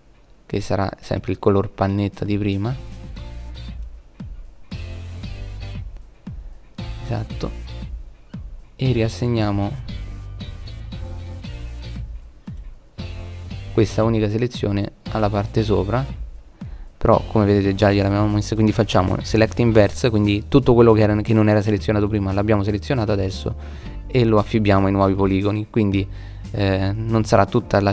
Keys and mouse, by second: 8.1 click, 9.4 click, 15.9 click, 17.4 click, 20.5 click, 25.7 click.